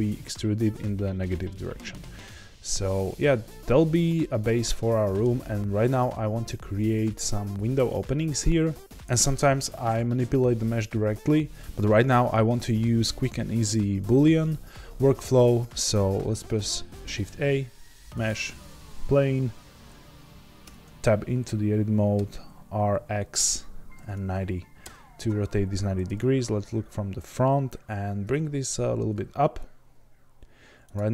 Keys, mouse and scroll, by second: 4.2 middle click, 5.8 Tab, 18.2 shift+a, 20.6 Tab, 22.2 r, 26.0 KP_1, 26.8-28.2 scroll up 2, 28.2 g.